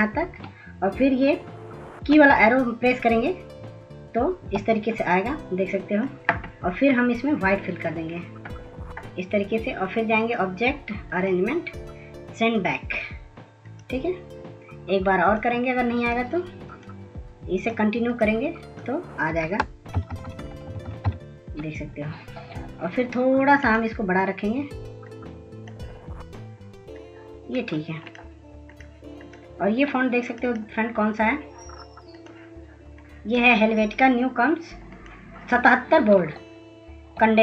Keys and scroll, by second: 2.5 typing, 2.7 Up, 3.6 Up, 4.9 Left, 5.3 typing, 20.5 ctrl+[, 20.6 ctrl+[, 20.9 ctrl+[, 37.1 ctrl+s.